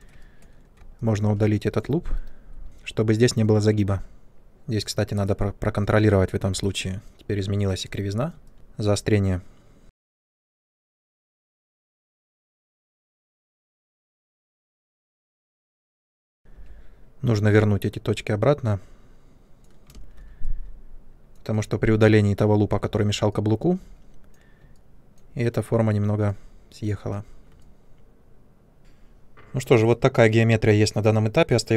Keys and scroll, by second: 2.1 Delete, 10.0 w, 11.0-13.3 typing, 13.0 ctrl+space, 14.5 space, 15.4 ctrl+space, 16.5 w, 19.9 ctrl+space, 28.8 3.